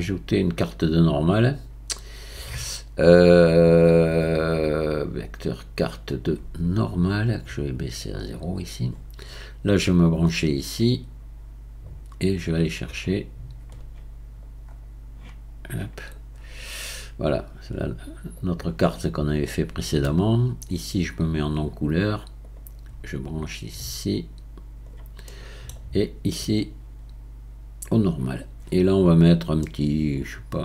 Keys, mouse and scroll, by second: 8.2-11.9 drag, 13.2-18.6 drag, 22.6-24.9 drag, 26.7-28.1 drag, 28.9-29.6 scroll up 5, 29.6-30.6 middle drag.